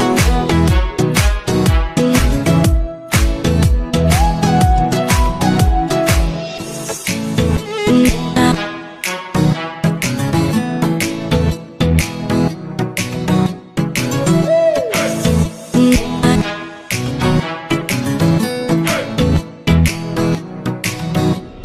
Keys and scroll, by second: 3.2 ctrl+z, 9.7 ctrl+z, 18.2 ctrl+z.